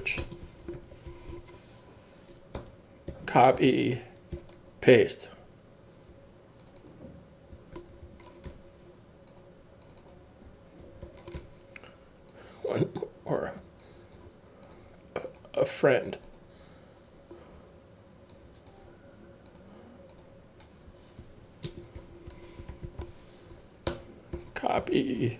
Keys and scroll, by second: 0.2 shift+space, 0.4 shift+s, 2.6 super+a, 3.1 super+c, 3.6 Tab, 4.3 super+v, 7.7 shift+w, 10.8 shift+w, 21.0-23.9 typing, 23.9 super+a, 24.3 super+c, 24.8 Tab.